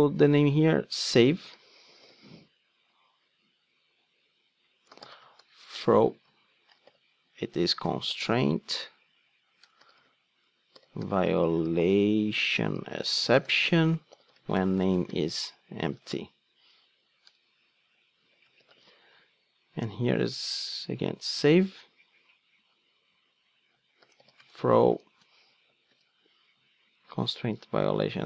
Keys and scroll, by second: 27.1 super+c.